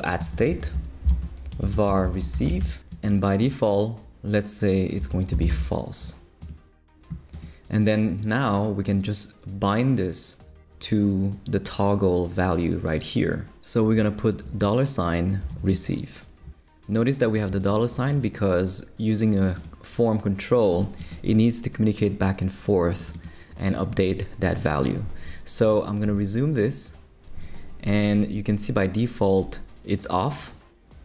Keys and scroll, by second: 0.0-3.6 typing, 4.7-5.9 typing, 14.3-16.0 typing.